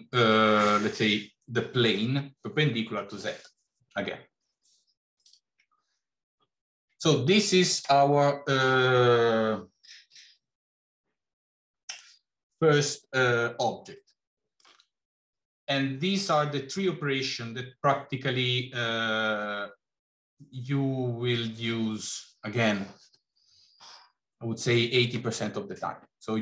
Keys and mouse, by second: 5.8 middle click, 14.2 middle click.